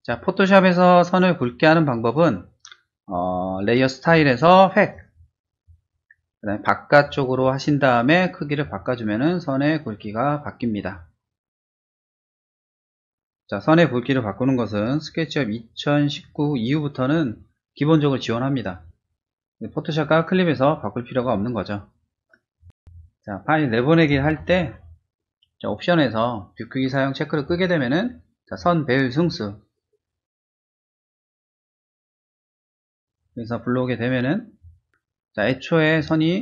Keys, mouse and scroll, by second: 4.0 click, 4.9 click, 7.0 click, 7.4 click, 8.6-10.8 drag, 12.7 click, 22.7 click, 25.6 click, 27.3 click, 28.4 click, 30.2 click, 31.1 click, 31.5 2, 32.5 click, 34.1 click, 34.8 click.